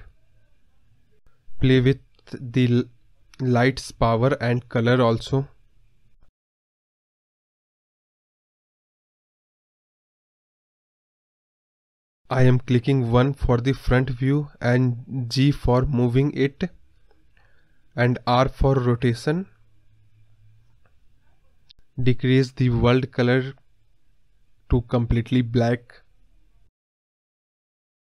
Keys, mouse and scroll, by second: 3.1 scroll down 4, 3.3-3.6 scroll up 1, 3.6 g, 5.7 scroll up 2, 5.9-8.3 middle drag, 8.3 KP_0, 8.9 scroll up 1, 9.0-11.7 middle drag, 12.1 scroll up 2, 12.3-13.2 middle drag, 13.4-13.9 scroll down 3, 13.5 middle drag, 13.9 KP_1, 14.2-14.8 scroll down 1, 14.8 shift+d, 18.4-18.8 scroll up 4, 18.8-20.9 middle drag, 20.9 KP_0, 21.3 scroll down 1, 21.3 middle click, 21.7 scroll up 5, 21.8 middle click, 22.0-23.0 scroll down 1, 23.0 click, 24.9 scroll down 1, 25.0 middle click, 25.3 scroll up 6, 25.5 middle click, 25.7 scroll down 4, 25.9-27.7 middle drag, 27.7 scroll down 1, 27.8 scroll up 1, 27.9 middle click.